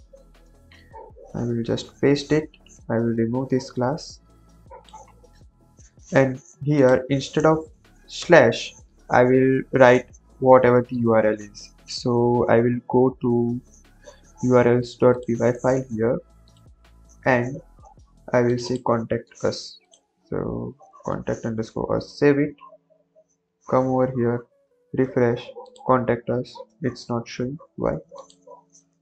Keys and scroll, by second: 0.9 Return, 0.9 Up, 1.8 ctrl+v, 5.3 BackSpace, 8.2 BackSpace, 19.1 ctrl+c, 21.2 ctrl+v, 21.7 ctrl+s.